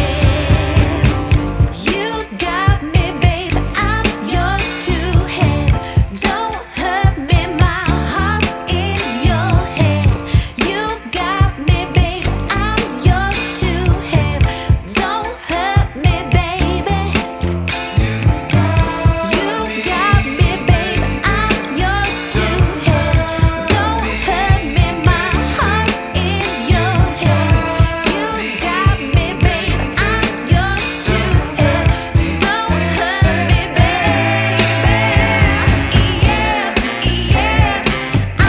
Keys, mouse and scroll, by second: 0.2-0.7 scroll down 2, 0.7 scroll up 1, 2.0 click, 4.6 click, 5.1 click, 6.7 click, 8.0-8.4 scroll down 3, 8.4 scroll up 2, 10.6 click, 17.8 click, 20.9 scroll up 1, 20.9 scroll down 1, 21.0-21.7 scroll up 2, 21.7 scroll down 1, 22.8 click, 24.0 scroll up 2, 24.1 scroll down 1, 24.7 click.